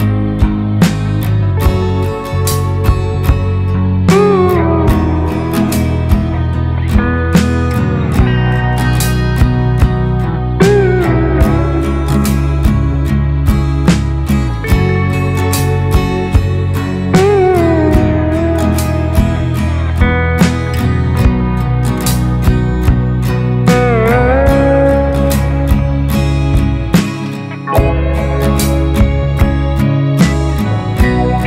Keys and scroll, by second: 9.8 ctrl+c, 19.3 ctrl+space, 26.0 ctrl+space, 28.2-29.0 typing, 29.2 Right.